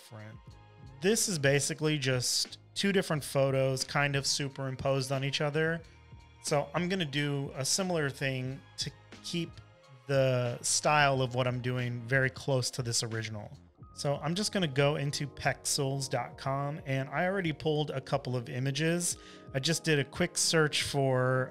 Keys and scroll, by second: 0.0-1.8 typing, 10.0 super+-, 10.5 super+-, 10.7-12.2 typing, 14.9 super+Tab.